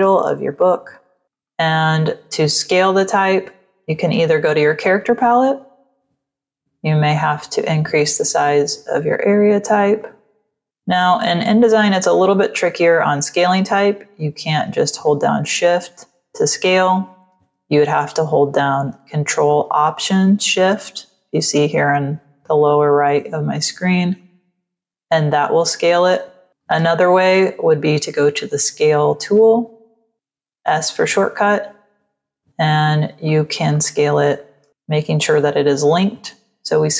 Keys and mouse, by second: 0.0-1.6 typing, 1.1 click, 4.1 click, 5.4 click, 6.5 click, 8.3 click, 9.9 click, 11.0 click, 14.8 shift+click, 16.6 ctrl+z, 24.1 ctrl+alt+shift+click, 26.5 ctrl+z, 30.9 click, 33.1 click, 34.6 KP_1.